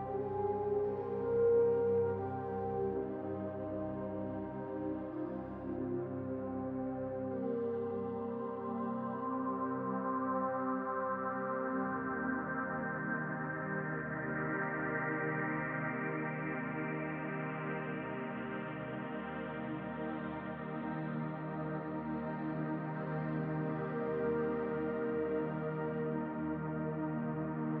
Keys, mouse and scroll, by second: 6.7-12.6 drag, 21.4-24.5 right drag, 24.9 click, 27.3-27.8 scroll down 1.